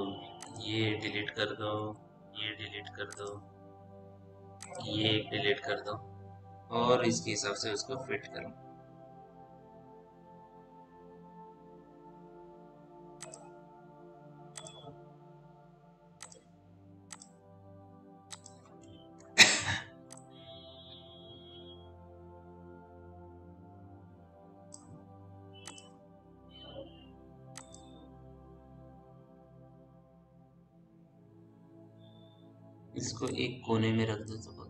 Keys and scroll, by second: 2.2 Delete, 6.6 f, 31.8 ctrl+z.